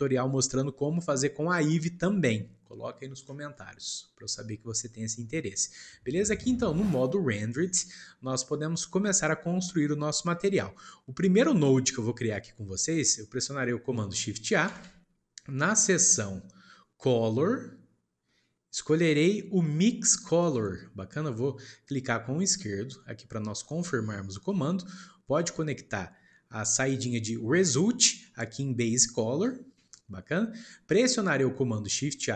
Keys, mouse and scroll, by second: 3.5-10.9 shift+middle drag, 10.9-11.4 scroll up 1, 11.4-11.9 scroll up 1, 11.9-12.9 shift+middle drag, 12.9 click, 24.9-28.0 shift+middle drag, 28.0 click, 29.8-30.5 shift+middle drag, 30.5 click.